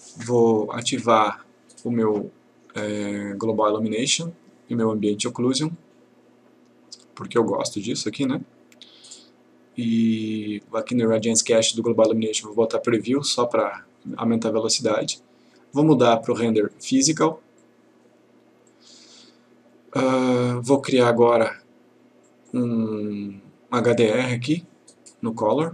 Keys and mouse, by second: 0.9 click, 4.0 click, 7.9 click, 10.9 click, 15.5-16.5 click, 21.5 click.